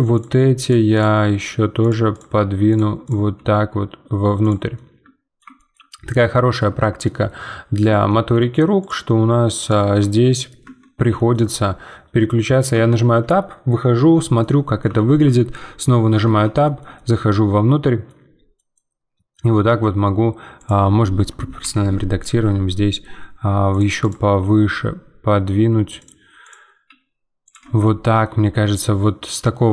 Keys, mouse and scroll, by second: 0.1 click, 0.3 g, 0.9 click, 1.2 g, 2.1 click, 2.3 g, 3.0 click, 3.3 g, 4.7-6.6 middle drag, 6.6 Tab, 7.0 middle click, 7.8 Tab, 8.1 middle click, 8.8 click, 9.1 g, 9.8 Tab, 9.9 middle click, 10.7 Tab, 11.2-12.7 shift+middle drag, 12.7 Tab, 14.4-16.2 middle drag, 16.2 Tab, 16.6-19.6 shift+middle drag, 19.6 g, 24.0 click, 24.4 g, 26.4 click, 26.8 g, 27.6 Tab, 27.8 middle click, 28.4 scroll down 2, 28.7-29.7 middle drag.